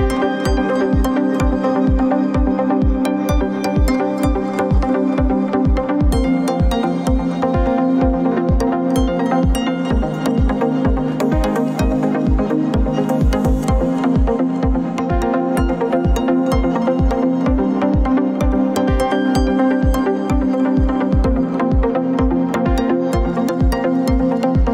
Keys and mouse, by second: 0.4-1.2 shift+middle drag, 1.6 middle click, 10.0 middle click, 11.2 shift+click, 12.1-12.8 shift+middle drag, 13.2-13.9 middle drag, 16.8-17.7 shift+middle drag, 18.3-20.6 middle drag, 22.6 click, 24.1 alt+shift+click.